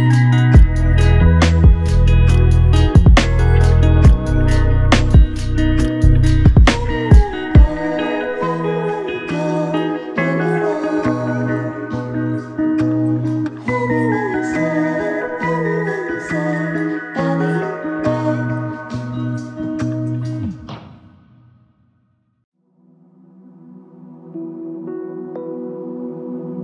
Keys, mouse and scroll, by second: 1.2 alt+click, 3.3 double click, 9.1 typing, 9.1 double click, 13.8 alt+click, 17.7 ctrl+click, 19.2 ctrl+click, 20.2 alt+click, 24.2 ctrl+z, 25.1 ctrl+click.